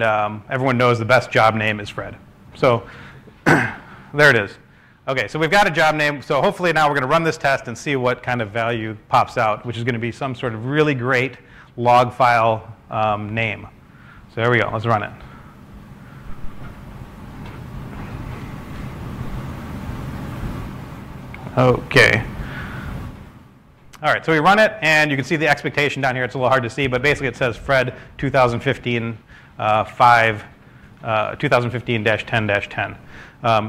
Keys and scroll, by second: 4.3 typing, 15.3-17.3 typing, 17.0 super+s, 29.0-29.8 typing.